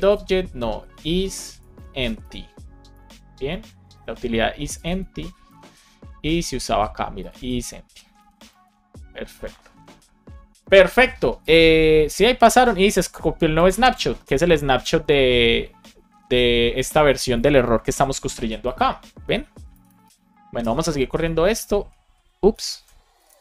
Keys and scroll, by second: 1.6 shift+e, 2.9 Return, 3.5 alt+shift+Left, 3.9 super+c, 5.1 super+v, 5.4 super+s, 8.1 super+v, 8.5 super+s, 20.5 Return, 21.5 ctrl+x, 22.4 ctrl+c.